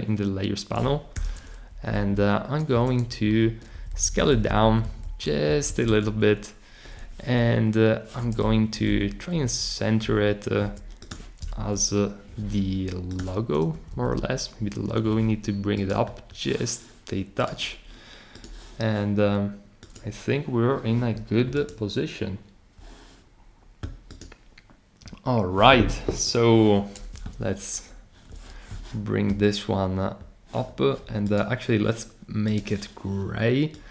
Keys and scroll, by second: 1.1 super+k, 1.7 shift+Down, 1.9 shift+Down, 2.7 Return, 3.2 shift+Up, 3.7 Down, 3.9 Down, 4.2 Down, 4.8 Down, 5.0 Down, 5.5 Left, 5.7 Left, 5.9 Left, 8.6 Down, 8.9 Down, 9.4 Up, 11.5 Down, 13.8 Up, 27.3 super+0.